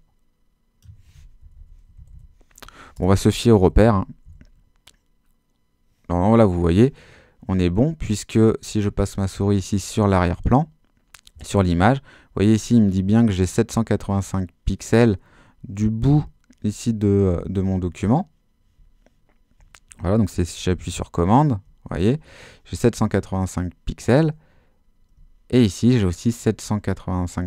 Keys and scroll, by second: 1.4 shift+Left, 2.0 Right, 2.9 Return, 3.4 super+Return, 3.6 super+-.